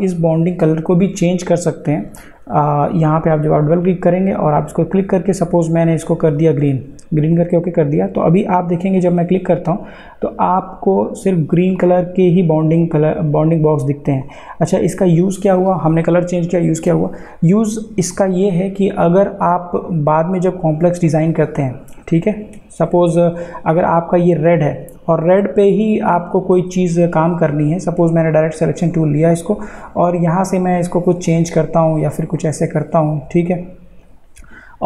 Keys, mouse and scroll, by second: 2.8 click, 11.8 click, 20.1 click, 23.7 click, 28.2-33.3 drag.